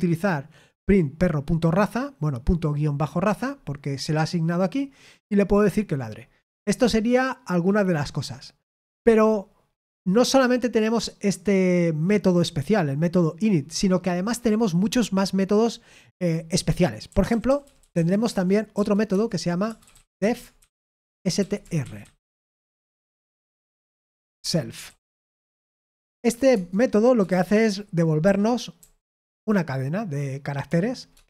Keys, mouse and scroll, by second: 17.0-22.4 typing, 19.0 Return, 23.9-31.2 typing, 26.4 Tab.